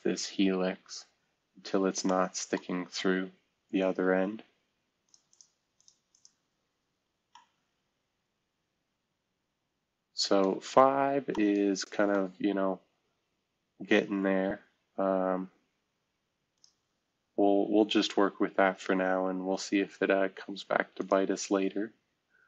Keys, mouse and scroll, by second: 0.9 scroll down 2, 1.7 scroll up 2, 2.0 middle click, 2.5 scroll down 2, 3.1-3.5 scroll up 2, 5.0 click, 11.0-11.7 scroll up 2, 11.3 middle click, 14.7-16.4 scroll down 2, 16.5 click, 20.9 click.